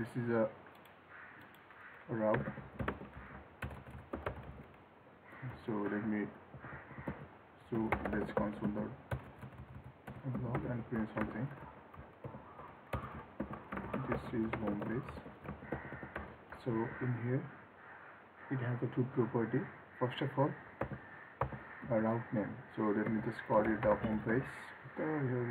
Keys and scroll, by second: 15.6 ctrl+s.